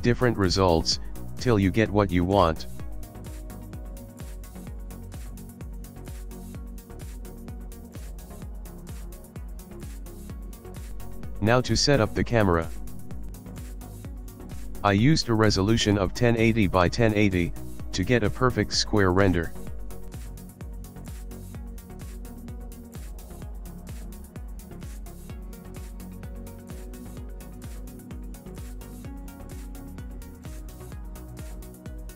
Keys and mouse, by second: 0.9 click, 1.3 click, 1.8 middle click, 4.3 middle click, 4.8 middle click, 6.1 KP_7, 7.3 ctrl+middle click, 8.5 shift+middle click, 10.4 ctrl+alt+KP_0, 11.8 click, 12.5 click, 14.2 click, 14.7 click, 15.4 click, 18.3 click, 22.2 click, 25.2 click, 26.0 click, 27.5 ctrl+middle click, 28.4 click, 30.0 middle click, 31.0 ctrl+middle click.